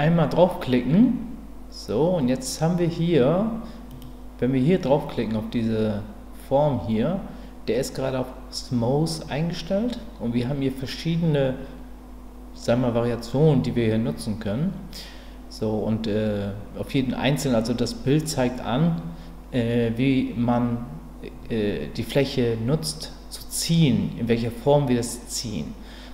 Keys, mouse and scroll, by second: 3.9-26.1 drag.